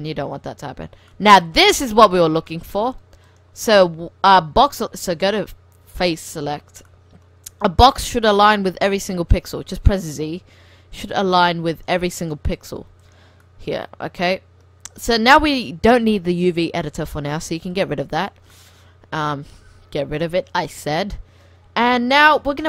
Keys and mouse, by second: 1.2 middle click, 3.3 middle click, 4.6 click, 5.1 middle click, 6.0-7.6 drag, 7.0-9.0 middle drag, 7.7 click, 9.0 right click, 9.5 z, 10.7 z, 11.4-14.1 middle drag, 14.2 click, 14.7 click, 14.7-16.1 middle drag, 17.8 click, 18.5 middle click, 19.3 click, 19.6 middle click, 20.2 click, 21.2-22.2 middle drag, 22.2-22.6 drag.